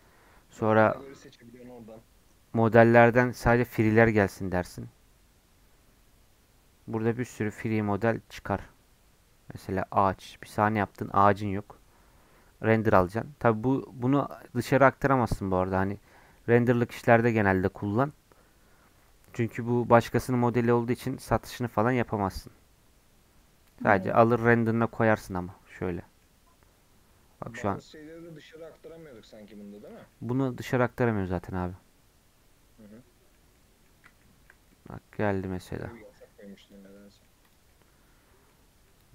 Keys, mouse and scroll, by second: 3.6-5.5 drag, 5.5-6.0 scroll down 2, 6.0 scroll up 2, 13.3-15.7 scroll down 4, 15.7-16.4 scroll down 5, 16.4-18.7 middle drag, 17.1-17.4 scroll down 1, 18.7-20.0 scroll down 1, 20.0-25.1 shift+middle drag, 25.1 scroll up 1, 25.2 click, 25.5-29.2 middle drag, 29.2-29.8 scroll down 3, 29.8 click, 30.1 middle click, 30.4-30.8 scroll up 2, 30.8 middle click, 31.5 scroll up 1, 31.6-33.4 middle drag, 33.4 scroll up 2, 33.5 middle click, 34.2-34.7 scroll down 3, 34.3 shift+middle click, 34.7-36.6 middle drag, 36.6 click, 36.9 middle click, 37.4 click, 37.7 middle click, 38.5-38.9 scroll up 1, 38.9-39.1 middle drag.